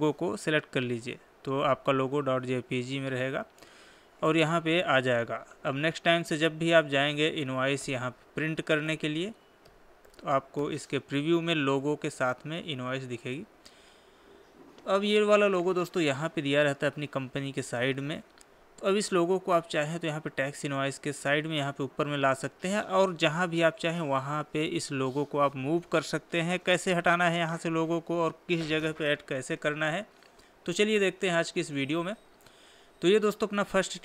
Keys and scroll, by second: 5.4 Escape, 8.8 ctrl+p, 10.0 Left.